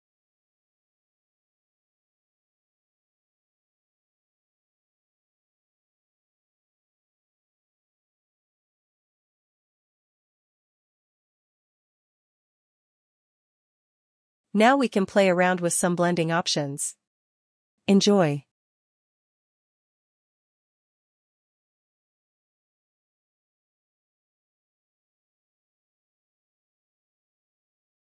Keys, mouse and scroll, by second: 2.5 click, 3.9 click, 5.6 click, 6.4 click, 8.0 click, 12.0 click, 19.7 click, 21.6 click, 22.8 click, 24.3 ctrl+click.